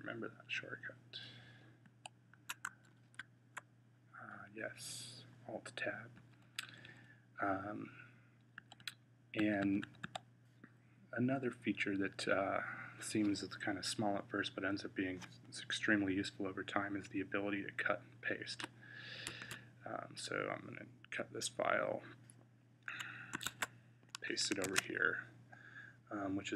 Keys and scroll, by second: 1.7 Right, 2.8 Tab, 6.0 Down, 6.3 Down, 6.5 Down, 6.7 Down, 8.4 Up, 8.6 Up, 9.2 Up, 9.5 Up, 9.7 Up, 9.9-12.8 Up, 19.1 x, 23.3 Tab, 24.6 super+v.